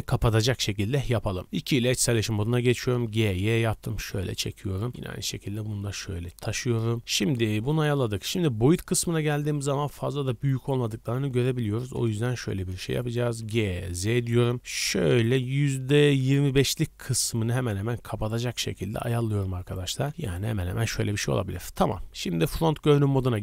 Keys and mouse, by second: 1.4 middle click, 1.4 2, 2.1-4.0 middle drag, 2.7 g, 4.4 click, 4.5 middle click, 4.9-6.2 middle drag, 4.9 g, 6.2-12.2 drag, 12.1 KP_Decimal, 12.2-17.8 middle drag, 13.4 g, 17.8-20.5 drag, 19.9 g, 20.9 KP_1.